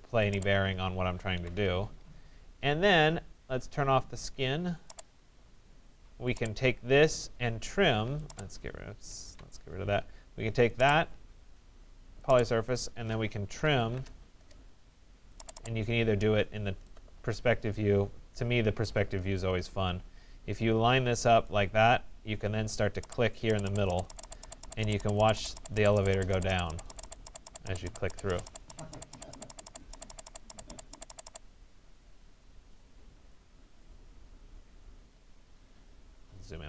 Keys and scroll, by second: 1.1 alt+Delete, 8.9 alt+Delete, 13.5 alt+Return.